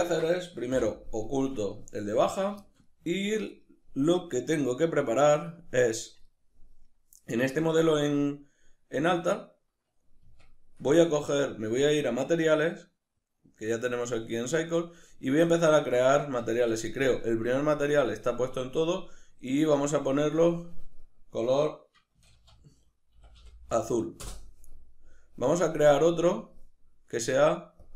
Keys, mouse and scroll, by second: 0.7 h, 2.3 right click, 2.6-4.6 shift+middle drag, 4.6-6.3 drag, 6.3-10.3 middle drag, 10.3 Tab, 10.9 ctrl+middle click, 11.8 click, 13.2-27.5 drag, 16.2 Tab, 24.2 Return, 27.8-27.9 drag.